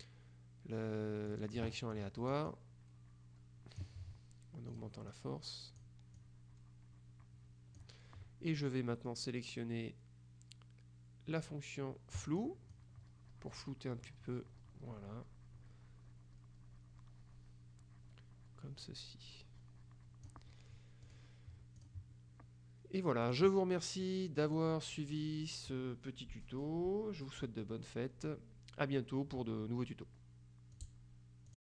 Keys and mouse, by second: 1.3-2.9 drag, 4.9 click, 6.3 click, 12.3 click, 21.1 click, 21.9 click, 23.3 click, 24.5 click, 30.9 click, 31.6 click.